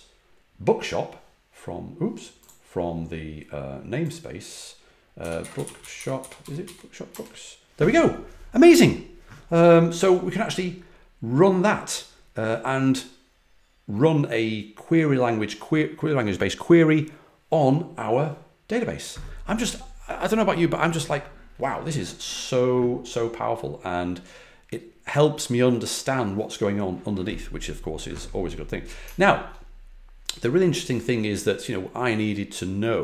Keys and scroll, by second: 2.6 Left, 4.9-7.5 typing.